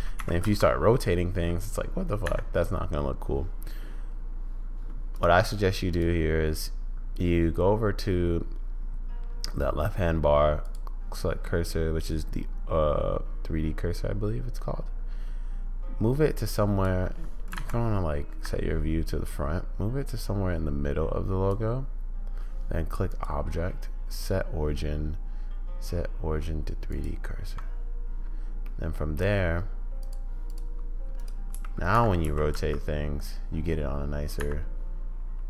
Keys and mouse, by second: 0.1 r, 5.9-8.0 drag, 10.6 click, 11.7-12.9 drag, 12.9-16.9 right drag, 17.6 `, 19.2 right click, 19.8-21.5 drag, 23.2-27.0 drag, 28.8-29.2 middle drag, 30.0 click, 31.5 g, 32.2 r.